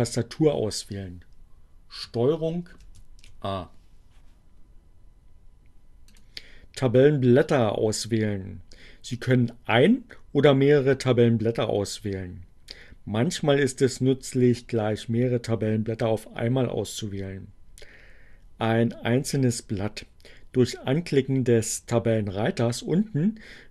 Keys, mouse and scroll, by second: 1.5 ctrl+a, 5.7 click.